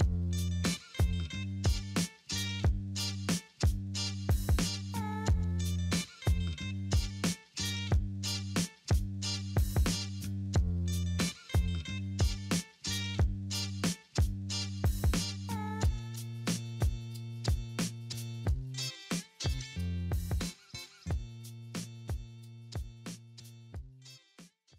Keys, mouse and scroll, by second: 0.5 middle click, 1.1 middle click, 1.4 scroll down 1, 1.4 alt+middle click, 3.1 scroll up 2, 6.2 scroll up 1, 6.9 scroll down 2, 7.4 alt+middle click, 12.2 alt+middle click, 14.1 middle click, 14.8-15.4 scroll down 1, 15.4-16.0 scroll up 2, 17.3 scroll up 1, 17.5 double click, 19.3 alt+middle click, 19.7 alt+middle click, 20.8 alt+scroll up 1, 23.7 right click.